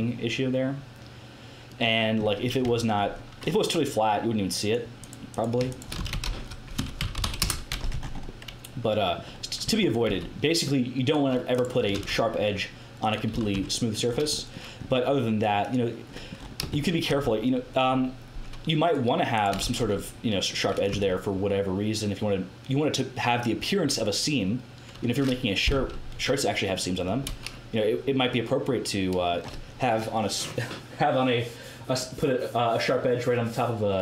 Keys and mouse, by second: 1.3 middle click, 1.7 middle click, 2.6 Tab, 4.5-6.7 drag, 4.9-6.9 right drag, 5.9 s, 6.9 s, 7.9 Tab, 9.6 Tab, 10.0 a, 11.0 right click, 11.9 ctrl+e, 13.3 a, 13.5 Tab, 15.5-19.3 middle drag, 17.1 Tab, 19.6 ctrl+e, 20.9 Tab, 26.6-34.0 middle drag.